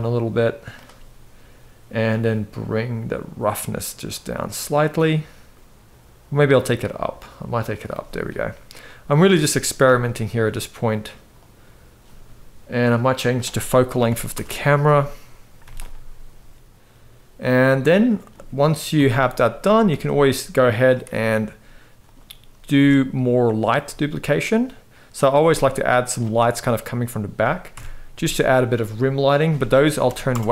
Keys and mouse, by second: 2.3-7.6 drag, 8.7 click, 9.5 g, 12.9-14.0 drag, 15.3 g, 16.5 ctrl+s, 17.2 click, 17.5 middle drag, 18.6 KP_7, 19.6 shift+d, 20.7 r, 22.4 shift+d, 23.8 r, 24.7 click, 25.0 g, 26.1 r, 27.4 KP_0, 29.1 click.